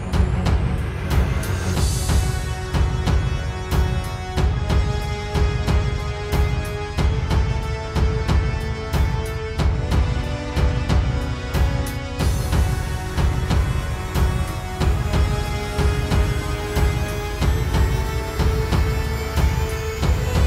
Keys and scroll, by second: 5.4 space, 6.0 super+space, 6.5 alt+space, 7.9 space, 8.5 space, 8.7 space, 14.5 space, 15.0 space, 15.5 space, 18.5 space, 19.3 space.